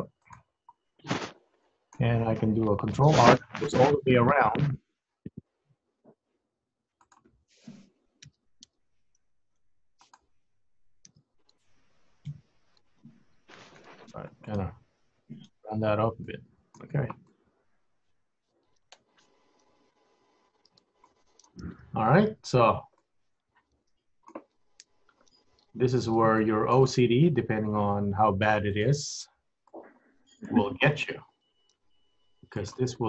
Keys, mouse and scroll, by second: 1.1-1.4 scroll up 1, 1.4 scroll down 2, 1.8 middle click, 2.9 ctrl+r, 8.4 g, 11.2 s, 14.6 middle click, 15.9 scroll up 1, 16.1-16.4 scroll down 5, 16.4 middle click, 16.9 Tab, 17.3 middle click, 21.3 scroll up 2, 21.5-21.9 scroll down 6, 22.2 Tab, 22.7 Tab, 23.1 middle click, 24.9 KP_1, 25.5 Tab, 25.7-26.3 scroll up 4, 26.5 shift+middle click, 27.1-27.5 scroll up 2, 28.7 click, 29.7 click, 31.9 g.